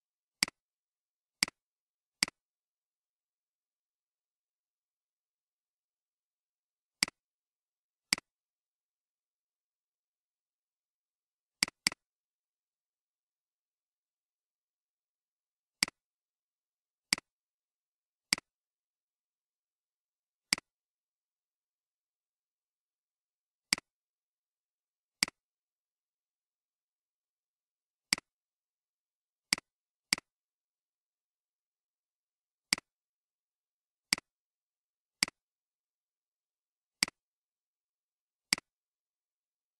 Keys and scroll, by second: 4.0-4.4 typing, 4.4 Return, 9.3-10.5 typing, 10.1 Return, 12.6-13.0 typing, 19.0-19.3 typing, 21.2-22.3 typing, 24.2-24.9 typing, 27.1-27.9 typing, 39.1-39.7 typing.